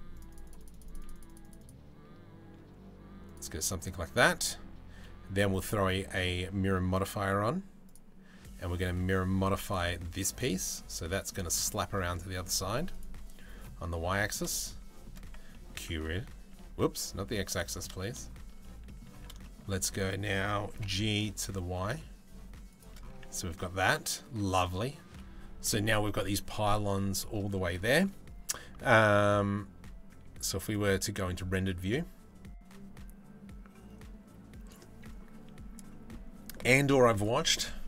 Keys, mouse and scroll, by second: 2.9 click, 5.1-7.6 drag, 9.3 middle click, 10.4 middle click, 11.2 shift+middle click, 12.6 middle click, 13.4-14.7 middle drag, 15.2 middle click, 15.5 Tab, 16.2 Tab, 17.2 middle click, 17.6 shift+middle click, 18.8 a, 19.1 shift+middle click, 20.4 g, 22.9 Tab, 23.1 middle click, 27.0 middle click.